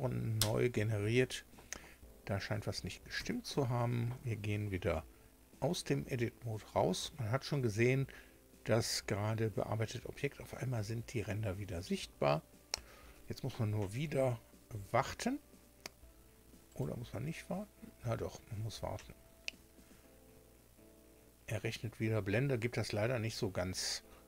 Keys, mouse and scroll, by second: 0.3 Return, 3.1 Tab, 16.7 right click.